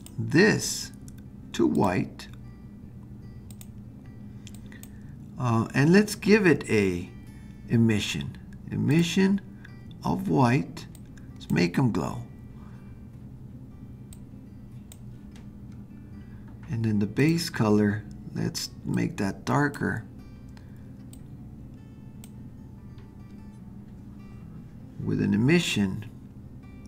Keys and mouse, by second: 0.0 click, 1.7 click, 8.9 click, 14.1 click, 17.2 click.